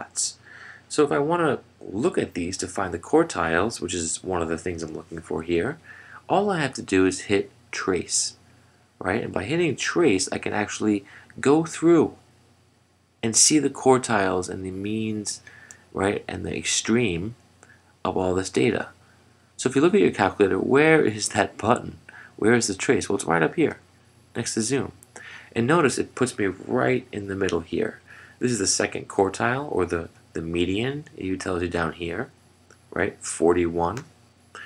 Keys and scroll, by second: 23.8 F4.